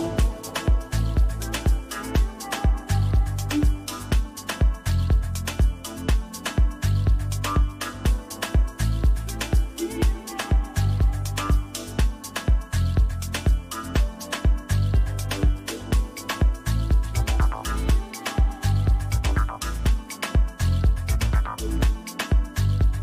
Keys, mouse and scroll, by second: 4.0 double click, 4.4 click, 4.8 double click, 5.4 click, 6.7 double click, 7.0 click, 7.2 double click, 7.3 click, 7.5 double click, 7.6 click, 7.9 double click, 8.0 click, 8.2 double click, 8.5 click, 11.0 double click, 11.1 click, 11.3 double click, 11.5 click, 11.6 double click, 14.4 double click, 15.9 click, 16.1 click, 18.2 click, 21.7-23.0 typing.